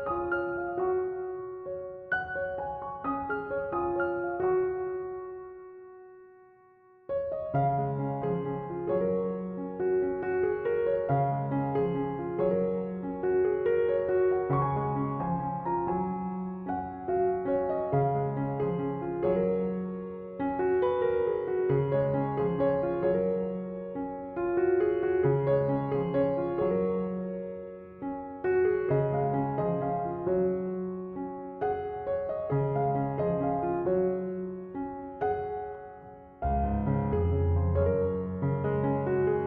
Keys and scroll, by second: 21.8 space, 28.0 space, 31.6 space.